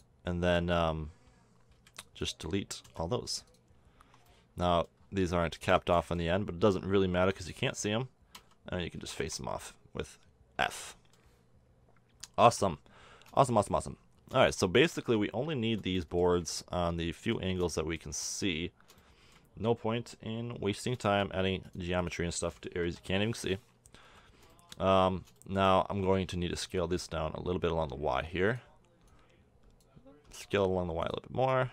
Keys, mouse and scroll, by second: 1.7 b, 2.8 x, 4.0 Tab, 5.6 Tab, 7.2 b, 8.3 f, 9.0 a, 9.2 Tab, 9.6-11.1 middle drag, 12.5 KP_7, 13.3 middle drag, 13.5-14.0 middle drag, 20.6-21.0 middle drag, 21.6-22.5 middle drag, 22.8 KP_7, 24.0 z, 26.6 s, 30.2 s.